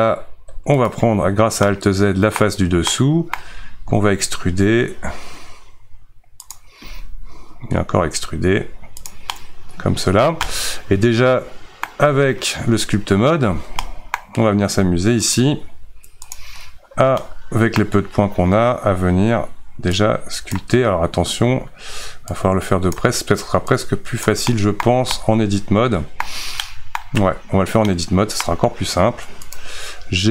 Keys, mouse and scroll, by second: 0.5 alt+z, 0.9 click, 1.7-3.8 middle drag, 3.8 e, 9.3-11.9 middle drag, 11.9 Tab, 13.6 alt+z, 13.8 middle click, 14.2-14.5 scroll down 2, 16.3 click, 16.6 scroll down 2, 17.2-19.9 middle drag, 19.9 click, 20.9-22.3 scroll up 1, 22.3-24.5 drag, 24.5 middle click, 24.8 scroll down 2, 25.1-27.1 middle drag, 27.1 Tab, 27.9-28.9 middle drag, 28.9 2, 29.5 click.